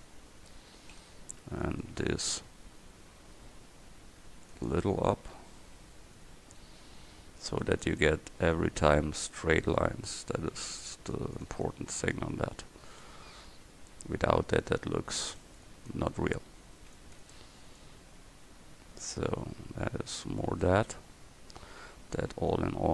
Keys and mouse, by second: 0.8 a, 1.1 c, 7.1 a, 7.4 c, 10.6 a, 13.7 a, 16.8 c, 21.9 a, 22.2 c.